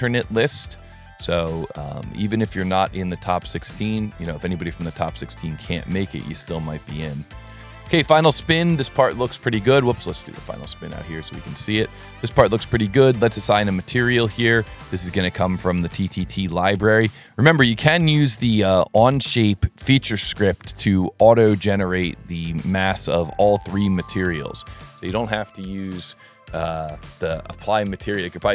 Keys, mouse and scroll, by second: 2.0 click, 2.9 click, 3.5 click, 3.7 middle click, 4.1 middle drag, 4.8 middle drag, 6.1-8.2 middle drag, 8.5-9.3 ctrl+middle drag, 9.9-11.6 middle drag, 12.8 right click, 14.8 click, 16.7 click, 17.4 click, 18.2 click, 21.4 click, 22.4 click, 23.8 click.